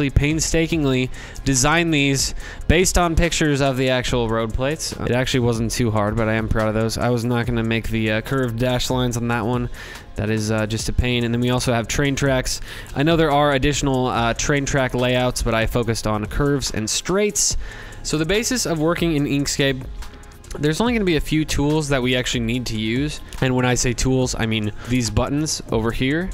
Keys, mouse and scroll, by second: 0.1-4.7 drag, 9.5 scroll, 10.9-18.3 middle drag, 18.4 middle click, 18.4 scroll, 19.6 shift+click, 20.5-21.4 scroll.